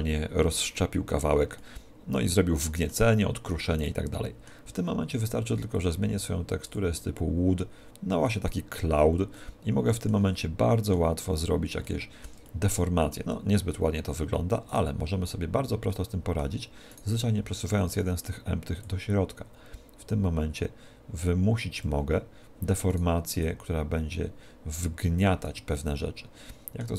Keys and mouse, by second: 1.7-5.8 middle drag, 5.8-8.5 drag, 9.3-14.3 middle drag, 14.8 right click, 15.9 middle click, 16.7 middle click, 17.1 right click, 18.7 middle click, 18.9 click, 22.9 right click, 23.5 click, 25.7-26.9 middle drag.